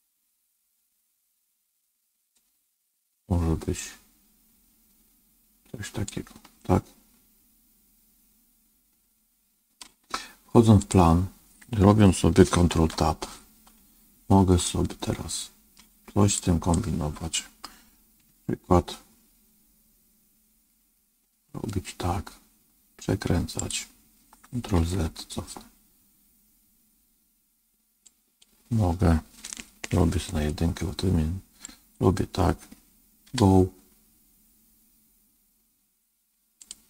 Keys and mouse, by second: 6.5-9.7 middle drag, 10.8-12.3 drag, 12.6 ctrl+Tab, 14.6-15.7 middle drag, 16.3 click, 18.1 g, 22.4 middle click, 24.7 ctrl+z, 28.1 click, 30.1 KP_1, 31.7 click, 33.2 g.